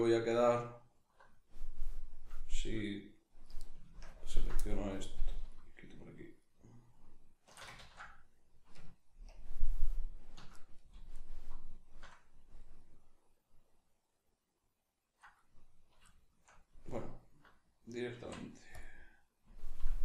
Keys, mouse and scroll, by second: 4.1 ctrl+KP_Add, 5.5 alt+shift+right click, 6.4 alt+shift+right click, 7.8 ctrl+z, 9.3 ctrl+KP_Add, 11.1 alt+shift+right click, 12.8-16.9 middle drag, 16.9 alt+right click, 18.2 x.